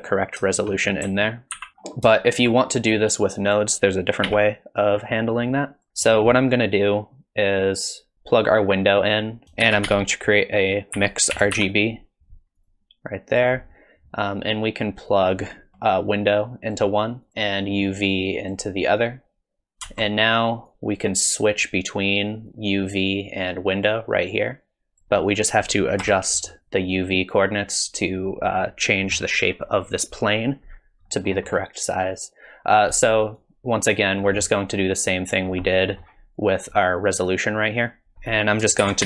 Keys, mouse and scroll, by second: 0.7 middle click, 1.5 ctrl+z, 1.7 middle click, 1.7-2.2 scroll down 3, 2.2 shift+middle click, 4.4 n, 5.5 click, 5.9 middle click, 6.3 click, 7.6 click, 8.1 click, 9.4 ctrl+z, 9.4 click, 9.6 shift+a, 15.1 click, 15.7 g, 16.0 click, 17.2 click, 17.3 ctrl+x, 17.9 click, 20.7 click, 22.5 click, 26.0 KP_0, 31.1 middle click, 31.5-32.2 scroll down 1, 32.2 click, 32.2 scroll down 2, 33.4 click, 35.3-36.1 scroll up 6, 35.8 middle click, 36.1-36.5 scroll down 1, 36.7 click, 38.1 scroll up 2, 38.1 g, 38.3 click, 38.8 shift+a.